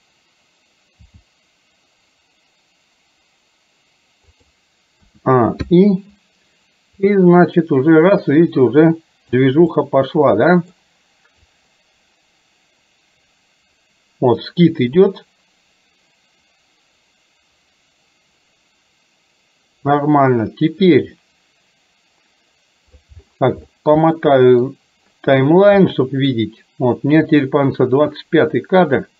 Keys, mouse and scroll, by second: 1.0 r, 5.0 a, 5.8 i, 7.2-9.4 drag, 9.8-10.8 middle drag, 11.5-23.0 drag, 24.2 middle click, 26.0 middle click, 27.4 click.